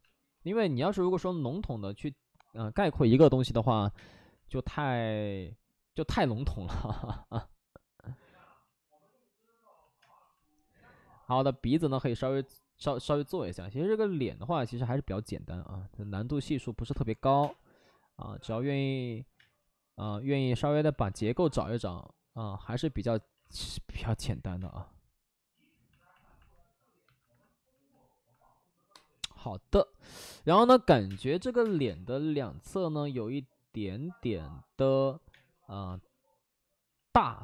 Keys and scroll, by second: 0.9 ctrl+z, 0.9 2, 3.7 1, 3.8 space, 9.9 space, 16.8 space, 17.0 3, 18.3 space, 19.3 space, 19.9 space, 23.3 alt+s, 24.5 space, 25.9 alt+s, 30.9-31.8 typing, 32.9 ctrl+z, 35.2 space, 35.8 space, 36.8 ctrl+z.